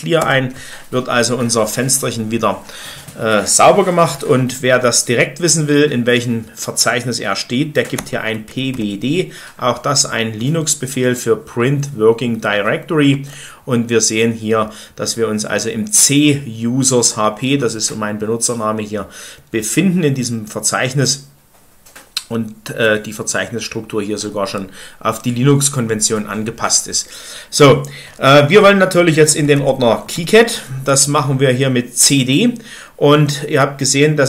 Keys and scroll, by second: 0.1 Return, 0.1 typing, 7.7-8.6 typing, 13.1 Return, 29.1-30.5 typing.